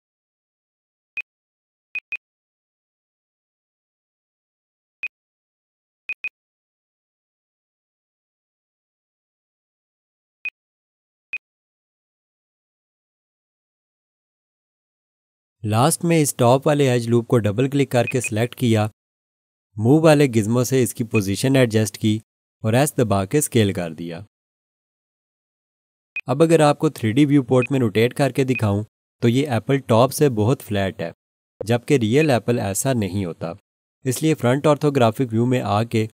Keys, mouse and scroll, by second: 1.1 click, 2.1 double click, 2.7 s, 5.0 click, 6.2 double click, 6.7 s, 10.4 click, 18.0 click, 18.2 double click, 19.9-21.1 scroll down 1, 21.1 click, 23.2 s, 26.1 click, 28.5 alt+click, 31.4-32.0 scroll down 1, 32.2 alt+click, 35.3 1.